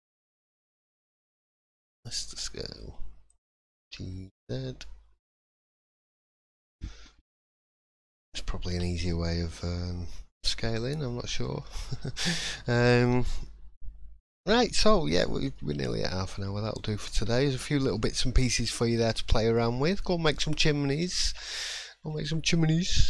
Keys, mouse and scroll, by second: 6.7 click, 7.0-7.4 scroll down 4, 7.3 middle click, 7.7 scroll up 1, 8.0 shift+middle click, 8.7 3, 8.9 middle click, 9.3 scroll down 1, 9.6 shift+middle click, 10.6 scroll down 2, 11.0 middle click, 11.6 shift+middle click, 12.0 scroll up 1, 12.6 middle click, 15.3 scroll down 2, 15.5 middle click, 16.0 scroll up 1, 16.6 shift+middle click, 17.4 scroll up 1, 17.9 middle click, 18.2 scroll up 2, 18.6 shift+middle click, 19.0-19.5 shift+scroll up 3, 19.5 middle click, 20.5-21.2 scroll down 4, 21.3 shift+middle click, 22.1-22.6 scroll up 2.